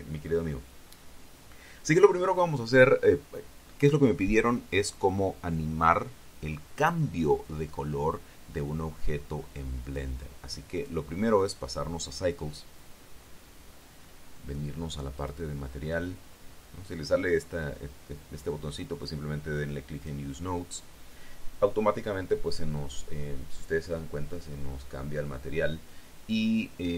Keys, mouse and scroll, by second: 10.7 click, 11.6 click, 14.9 middle click, 16.0 click, 20.9 click.